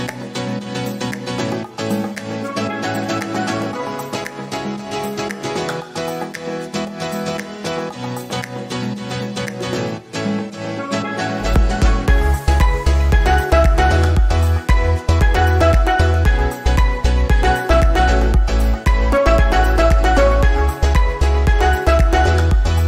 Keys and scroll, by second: 16.8 ctrl+z.